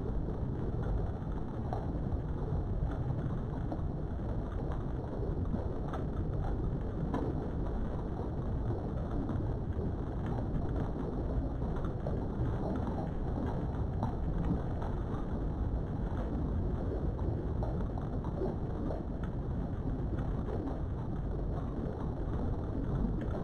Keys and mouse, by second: 2.4 right click, 4.2 click, 5.7 s, 7.2 click, 7.6 g, 8.2 right click, 8.4 g, 8.7 x, 9.2 right click, 9.7 g, 10.1 y, 11.4 click, 12.8 s, 13.4 click, 13.9 click, 14.8 s, 16.2 click, 16.6 g, 17.2 click, 17.6 click, 18.3 s, 18.8 click, 19.1 g, 20.3 click, 20.9 click, 21.5 s, 22.9 click, 23.0 g.